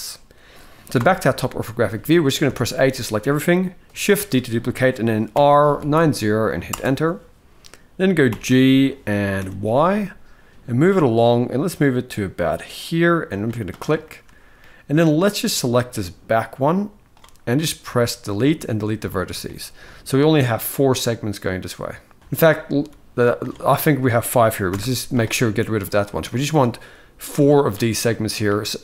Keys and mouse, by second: 0.7 KP_7, 2.1 a, 2.7-3.0 shift+middle drag, 3.9 shift+d, 8.0 g, 13.7 shift+middle click, 14.8-16.8 drag, 17.5 x, 19.2 shift+middle click, 22.2 click, 24.4 x, 25.7-27.2 drag, 27.8 shift+middle click, 28.7 click.